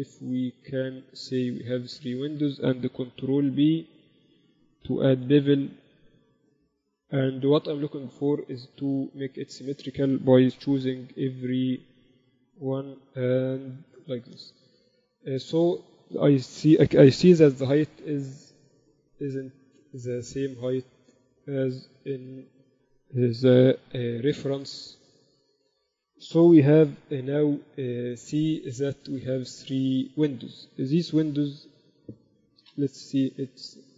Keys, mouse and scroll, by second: 0.9 ctrl+r, 2.1 a, 2.5-4.3 right drag, 3.5 ctrl+b, 5.3 ctrl+b, 8.5-10.3 drag, 8.8 a, 9.4-11.9 right drag, 10.9 ctrl+b, 15.7-17.3 drag, 15.8-17.8 typing, 19.7-21.5 drag, 22.7 ctrl+t, 24.1 ctrl+r, 27.1 ctrl+KP_1, 27.3 z, 28.7-30.5 drag, 29.3-30.9 right drag.